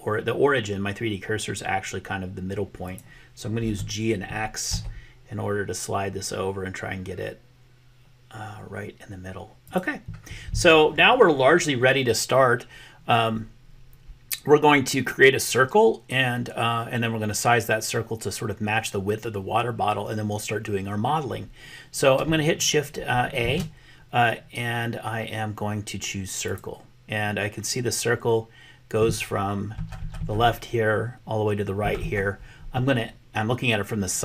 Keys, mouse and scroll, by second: 3.7 g, 23.5 shift+a.